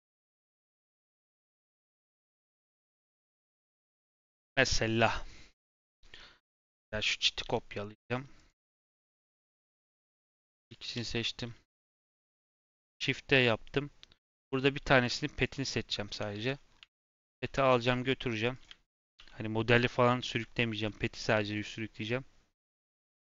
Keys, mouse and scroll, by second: 0.0 click, 0.5-0.9 scroll down 1, 0.9 scroll up 2, 1.4 Tab, 1.9 click, 2.2-2.8 scroll up 3, 2.3 shift+middle click, 2.8-3.4 scroll down 1, 3.4-6.4 shift+middle drag, 6.4 click, 7.4 KP_7, 8.3 click, 8.7-9.3 scroll up 4, 9.3 shift+middle click, 9.8 click, 11.1-11.6 scroll down 2, 11.6 g, 12.5 shift+d, 13.4 scroll up 3, 14.2 click, 14.3 click, 14.9 click, 15.4 click, 16.0 Tab, 16.3 a, 16.5-16.9 scroll down 4, 17.0 shift+middle click, 17.2 g, 18.8 shift+middle click, 19.0 scroll up 1, 19.1 g, 20.4 scroll up 4, 20.6 shift+middle click, 21.0 scroll up 1, 21.3 shift+middle click, 21.5-22.1 scroll down 2, 22.1 click, 22.7 s.